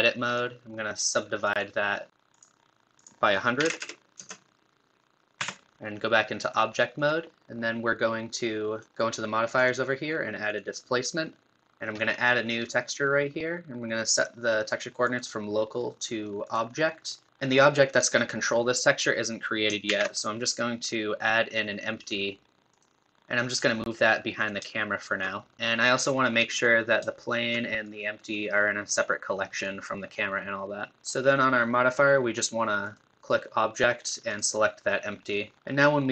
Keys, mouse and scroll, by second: 0.3-3.0 right drag, 3.0 click, 3.8 KP_0, 5.4 Tab, 6.0-7.0 middle drag, 7.0-9.6 drag, 10.6-11.7 drag, 12.7-17.3 drag, 19.9 shift+a, 23.1 shift+middle click, 23.6-24.7 drag, 24.7-26.5 shift+middle drag, 26.5 click, 27.2-30.5 shift+drag, 30.8 middle click, 32.8-35.5 drag.